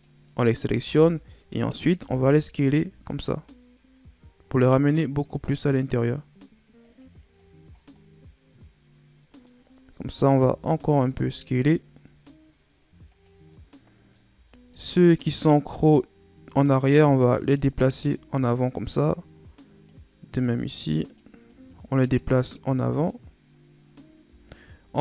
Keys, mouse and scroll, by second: 0.7 z, 2.0 s, 7.3-7.7 scroll down 3, 7.7-9.6 middle drag, 9.6-10.2 scroll up 2, 10.2 s, 13.5 middle click, 14.3-14.7 scroll up 2, 14.7 middle click, 15.2-15.9 scroll up 1, 15.9 right click, 17.8-18.7 scroll down 5, 18.8 right click, 20.4 right click, 21.4 right click, 22.2-25.0 middle drag.